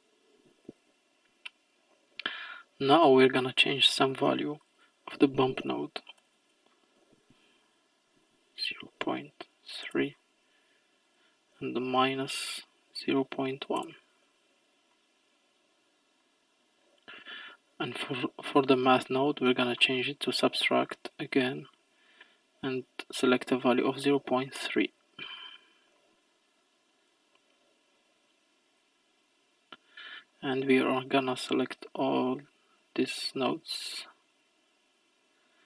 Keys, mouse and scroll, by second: 1.2-2.5 scroll up 7, 2.5-4.7 middle drag, 4.7-6.4 drag, 6.4 BackSpace, 6.5 BackSpace, 11.1-14.1 drag, 14.9-19.1 middle drag, 21.3-25.1 drag, 26.0-28.5 middle drag, 28.5 scroll down 6, 28.7 click, 29.2-30.4 scroll down 3, 30.4 click, 32.8 click, 34.3-35.4 drag.